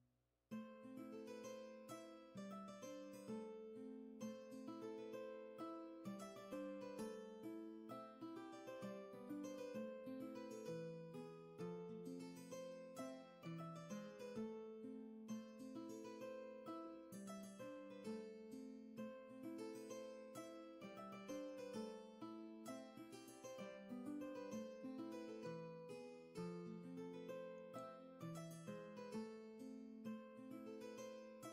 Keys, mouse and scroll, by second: 2.5 ctrl+z, 8.3 ctrl+z, 14.6 ctrl+z, 20.4 ctrl+z, 29.5 ctrl+z.